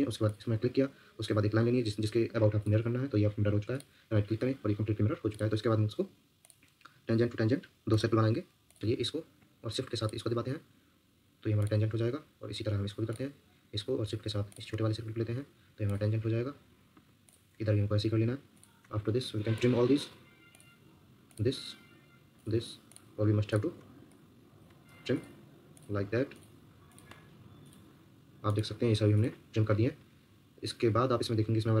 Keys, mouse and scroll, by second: 5.1 Escape, 8.8 Escape, 10.0 shift+click, 12.4 Escape, 13.7 Escape, 14.5 shift+click, 16.9 Escape, 18.5 shift+click, 18.8 Escape, 19.3 Escape, 24.1 ctrl+middle click, 29.8 Escape.